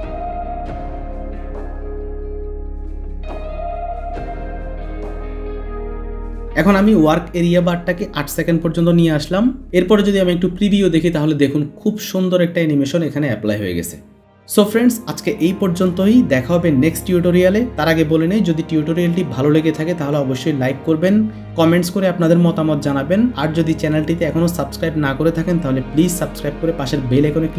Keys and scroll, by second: 8.1 n.